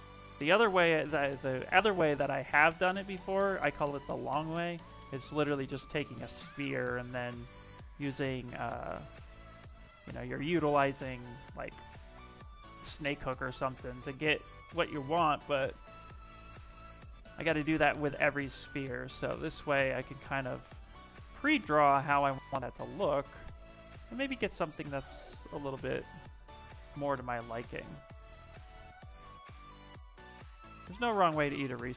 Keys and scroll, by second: 3.8 s, 6.0 ctrl+z, 8.8 ctrl+z, 9.1 s, 14.2 s, 16.7 s.